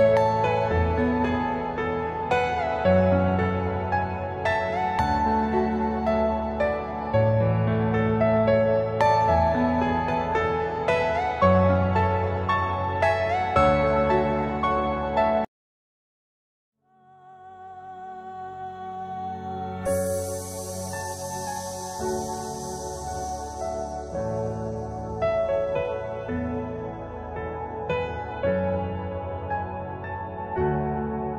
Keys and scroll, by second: 0.1 shift+Page_Down, 1.5 alt+c, 4.4 c, 4.8 Escape, 5.5 alt+c, 9.1 b, 9.4 Escape, 17.0 space, 17.3 F4, 19.1 alt+c, 20.7 F4, 21.1 Escape, 23.6 c, 23.9 shift+F2, 24.7 Escape, 26.4 F2.